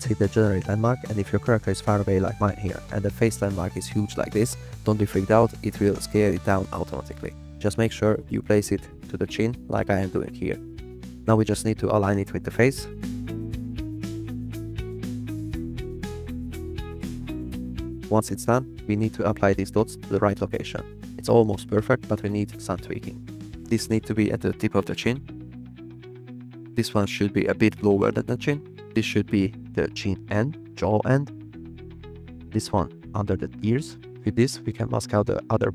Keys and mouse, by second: 1.5-2.0 drag, 4.8 click, 14.7 click, 17.8 click, 21.5 click, 24.3 g, 25.9 g, 26.6 click, 27.3 g, 28.6 click, 29.5 g, 30.0 click, 30.8 click, 31.2 g, 32.0 click, 32.2 g, 32.7 click, 34.5 click.